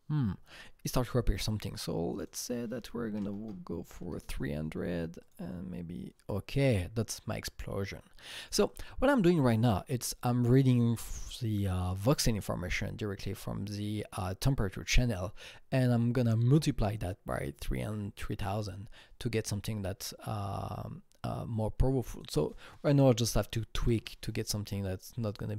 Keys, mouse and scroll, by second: 2.1 KP_Enter, 2.1 double click, 3.0 KP_3, 3.2 KP_0, 3.3 KP_0, 3.8 KP_0, 4.0 KP_Enter, 5.2 click, 8.3 KP_Enter, 8.3 click, 22.0-23.1 drag, 23.1 KP_2, 23.3 KP_0, 23.4 KP_0, 23.7 KP_0, 23.9 Return, 25.2 click.